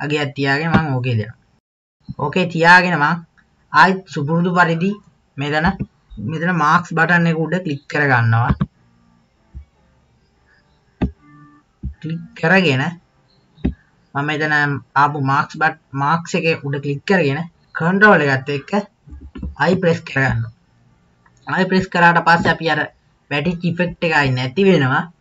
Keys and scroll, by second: 5.7 KP_3, 8.6 KP_2, 19.2 ctrl+i.